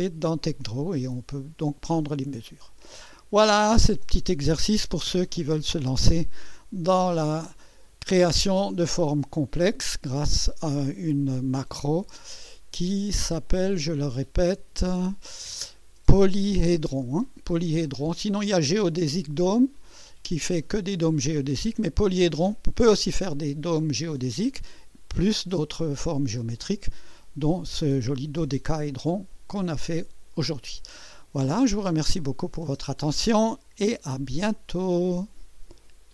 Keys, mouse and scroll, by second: 1.0-2.9 drag, 6.5-7.8 drag, 8.3-10.2 drag, 13.5 click, 30.4 click, 32.4 click, 32.7 space, 34.9 right click.